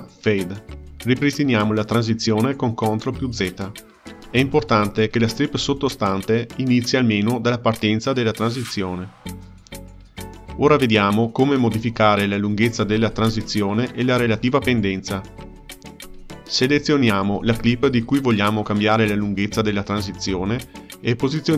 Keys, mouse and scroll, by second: 1.7 ctrl+z, 4.8-6.8 ctrl+middle drag, 6.8-11.1 drag, 11.4-17.9 ctrl+middle drag, 18.3 click, 20.3-21.5 drag.